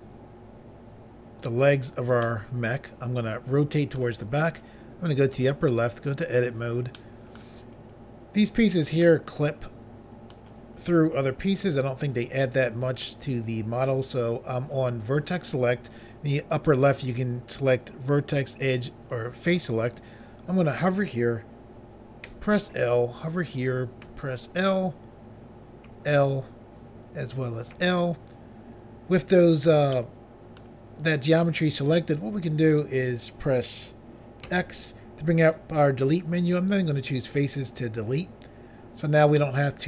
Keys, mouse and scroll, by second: 2.2 middle click, 5.3 click, 5.5 click, 6.1 click, 6.2 click, 6.9 middle click, 7.8 scroll up 1, 9.0 middle click, 22.3 l, 24.1 i, 25.9 i, 27.7 i, 29.9 middle click, 31.4 scroll down 1, 34.5 x, 37.0 click, 37.1 click, 39.4 middle click.